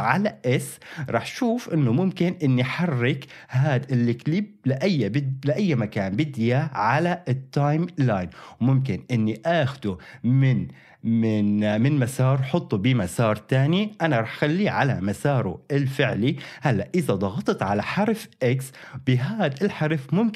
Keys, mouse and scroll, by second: 0.0 s, 1.6-15.0 drag, 1.6 s, 17.7 x.